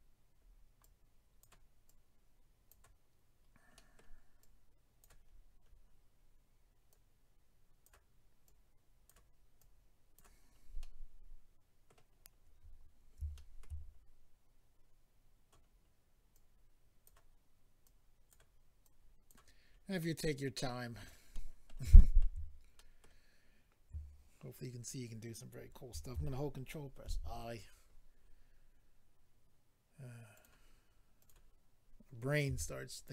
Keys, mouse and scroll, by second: 0.4-1.0 scroll up 2, 0.8 click, 1.8 click, 2.7 click, 3.7 middle click, 4.4 click, 5.3-6.2 scroll down 3, 6.9 click, 8.4 click, 9.6 click, 10.4 scroll down 3, 10.8 middle click, 12.1-13.0 scroll up 2, 13.0 scroll up 2, 13.3 shift+middle click, 13.8-14.8 scroll up 1, 15.0 scroll up 1, 15.7 scroll up 1, 16.3 click, 17.0 click, 18.8 click, 19.6-20.0 scroll down 3, 20.0 middle click, 21.0 scroll down 2, 21.3 middle click, 21.9 shift+middle click, 22.8 middle click, 27.0 ctrl+i, 27.7-28.2 scroll up 3, 30.3 click, 30.4 click, 31.2 click, 31.3 click, 32.4 f, 32.9 click, 33.0 click.